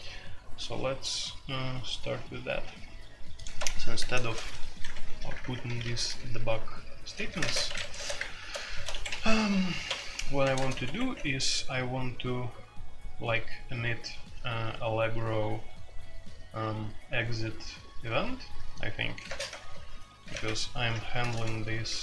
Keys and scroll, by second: 3.5 Escape, 4.2 shift+a, 4.8 Escape, 5.0 i, 5.2 Return, 5.4 Return, 5.5 Escape, 5.6 k, 5.8 k, 7.3-10.6 typing, 7.6 Escape, 10.8 Escape, 19.2-20.3 typing, 21.2 ctrl+n, 21.3 ctrl+n.